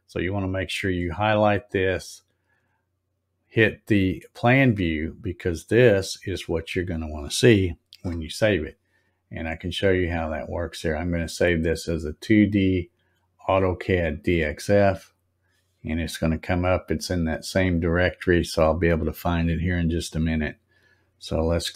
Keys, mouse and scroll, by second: 0.6 click, 4.0 click, 5.1 click, 6.1-6.6 scroll down 2, 10.2 click, 14.1 click.